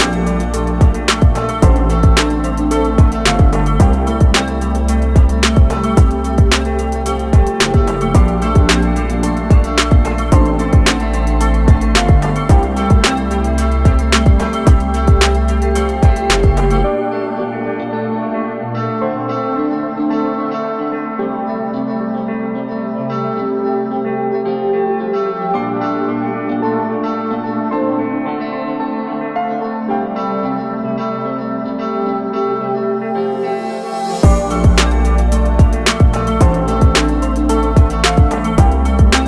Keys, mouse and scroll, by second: 2.4-3.7 alt+scroll down 2, 3.9 click, 6.7 alt+scroll up 1, 7.5 scroll up 1, 8.8 alt+shift+click, 9.7 alt+shift+click, 14.9 ctrl+click, 15.7 ctrl+click, 19.0 ctrl+click, 22.8-23.3 alt+scroll down 3, 24.8 click, 28.0 alt+click, 28.2 scroll up 1, 28.8 scroll up 1, 29.7 click, 33.1 click, 34.1 click, 36.3 click, 37.1 click.